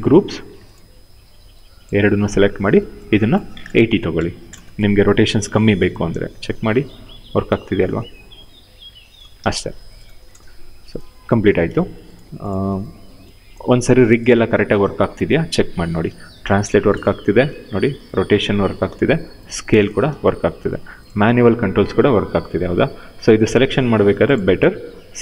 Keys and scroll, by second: 3.6 8, 4.1 Return, 9.1 ctrl+z, 9.8 0, 9.9 Return, 15.3 e, 15.8 w, 16.8 ctrl+z, 17.1 e, 18.1 ctrl+z, 18.5 r, 19.8 ctrl+z, 21.1 e, 22.9 ctrl+z.